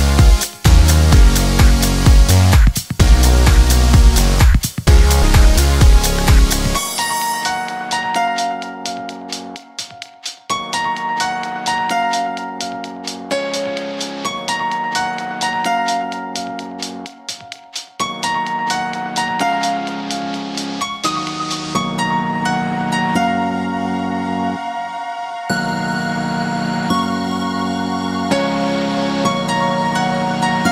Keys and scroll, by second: 6.8 Delete, 18.2 Delete.